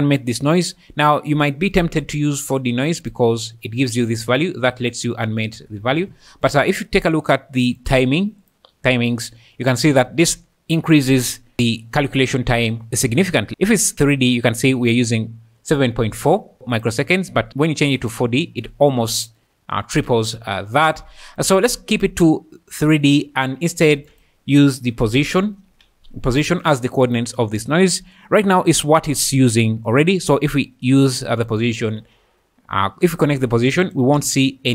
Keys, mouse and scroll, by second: 2.4-3.2 drag, 4.1 shift+click, 6.0 ctrl+z, 7.8 click, 13.5 click, 16.9-18.1 drag, 21.5-22.8 drag, 23.9 shift+a, 28.3 click, 30.5 drag, 33.9 shift+click, 34.2 space.